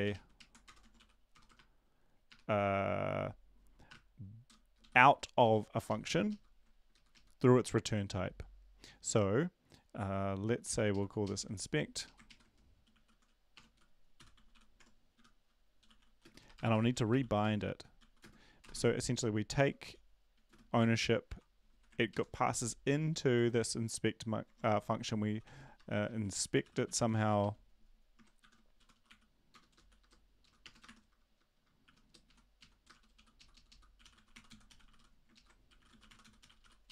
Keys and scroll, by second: 0.0 typing, 0.9 ctrl+shift+Left, 4.4 Return, 4.4 BackSpace, 4.8 Up, 5.8 End, 5.8 Left, 6.0 Left, 7.1 shift+Left, 10.8 ctrl+Left, 10.9 ctrl+Left, 12.3 Left, 12.3 ctrl+shift+Right, 12.6-19.2 typing, 19.2 Left, 19.8 Left, 21.7 Right, 21.7 typing, 26.7-27.8 typing, 28.4 shift+Home, 28.8-36.9 typing, 29.5 Return, 30.5 Left, 32.2 Right, 32.6 Right, 33.5 Left, 33.7 Left.